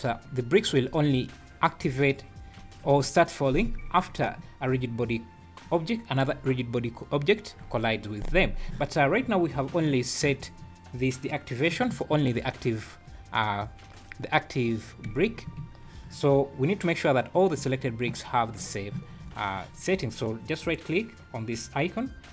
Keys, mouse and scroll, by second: 0.0 `, 1.6 scroll down 2, 2.2 scroll down 1, 9.9 scroll up 4, 15.0 space, 15.6 Escape, 20.6 right click.